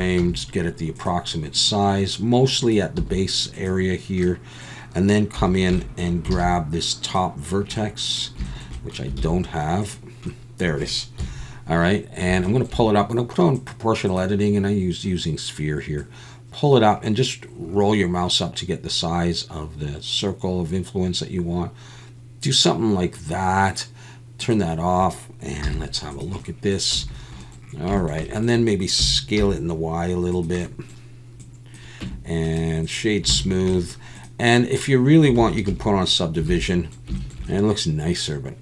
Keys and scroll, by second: 0.2 s, 3.0 s, 5.4 1, 6.4 alt+a, 9.2 alt+a, 11.2 KP_1, 25.6 z, 26.9 a, 29.0 s, 29.4 y, 32.0 Tab, 33.4 alt+a, 35.7 ctrl+1, 36.5 alt+a.